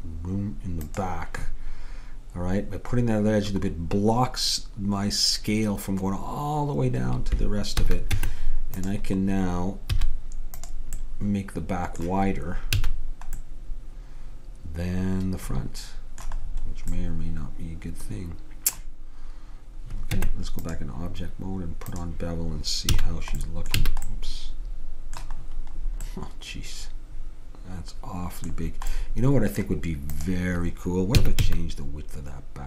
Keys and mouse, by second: 7.9 a, 8.2 Tab, 10.0 z, 12.8 a, 13.6-15.6 middle drag, 17.1-20.2 middle drag, 20.2 Tab, 22.0-23.9 drag, 23.0 a, 23.9 a, 30.2-32.0 drag, 31.2 s.